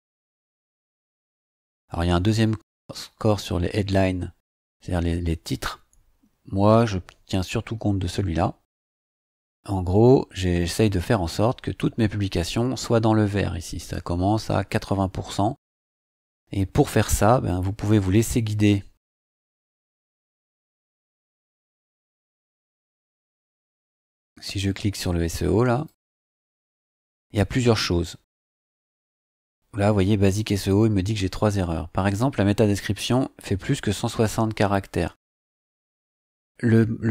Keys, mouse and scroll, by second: 19.3-20.0 drag, 21.1-22.0 drag, 23.5 click, 25.7 click, 30.2 click, 31.4 scroll down 2.